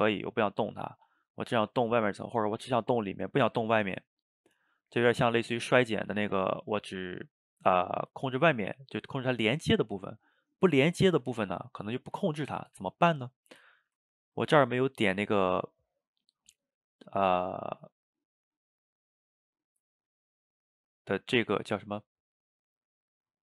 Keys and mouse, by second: 0.7-1.7 drag, 1.7 ctrl+z, 2.1 click, 2.5-3.8 middle drag, 3.8 f, 4.4 middle click, 5.1-6.7 drag, 6.7-9.7 middle drag, 13.2-14.8 middle drag, 14.8-17.8 drag, 18.9-20.5 drag, 20.8-22.7 drag.